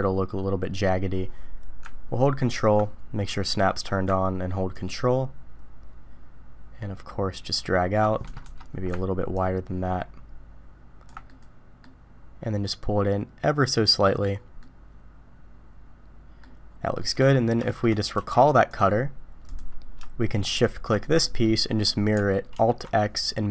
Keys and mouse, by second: 3.5 click, 4.8-8.4 ctrl+drag, 8.4 Escape, 9.4-14.1 ctrl+drag, 14.6-16.4 middle drag, 17.0 middle click, 17.6 shift+middle drag, 18.1 q, 20.5 shift+click, 21.0 middle click, 21.4-21.9 middle drag, 22.6 alt+x.